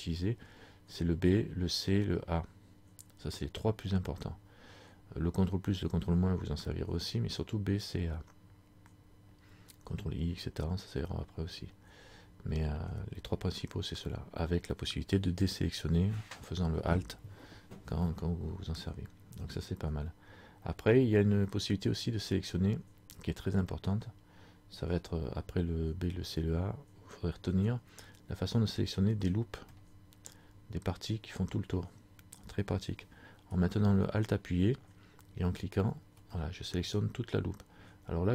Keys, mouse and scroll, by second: 21.6 middle click, 22.6 scroll down 1, 23.8-24.4 scroll up 2, 25.5 scroll down 1, 28.9 middle click, 29.8 middle click, 35.7 alt+right click, 36.4 middle click, 37.3-38.3 scroll up 2.